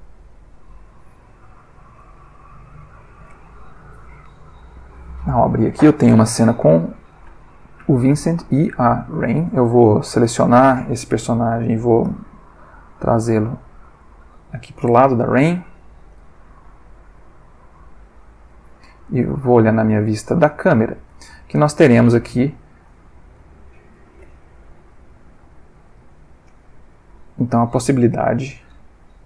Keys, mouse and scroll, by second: 6.8-8.1 middle drag, 8.2 middle click, 9.2 click, 11.8 g, 12.0 y, 13.9 click, 14.9 g, 16.2 x, 18.0 click, 19.1 click, 20.1-21.3 ctrl+middle drag, 21.4-22.0 ctrl+shift+middle drag, 22.1-23.2 ctrl+shift+middle drag, 23.4-24.1 ctrl+shift+middle drag, 25.9 click, 29.0 g.